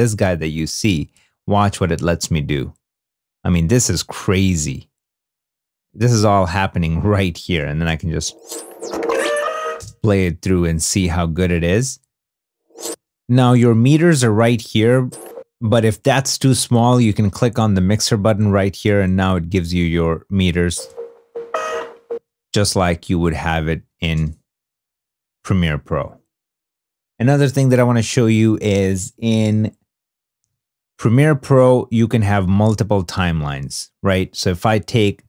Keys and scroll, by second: 7.8 space, 9.7 space, 12.1 space, 15.0 space, 15.3 space, 20.7 space, 22.0 space, 22.5 super+Tab, 24.1 space, 30.3 super+Tab.